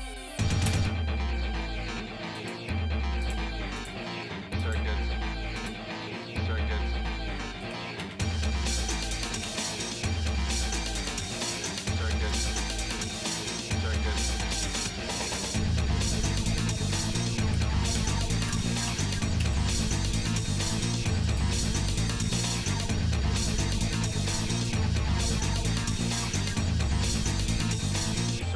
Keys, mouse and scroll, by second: 2.6 click, 3.9-6.2 drag, 7.7 r, 12.3 click, 12.8-16.6 drag, 17.6 r, 22.6-25.2 drag, 26.0-28.5 drag.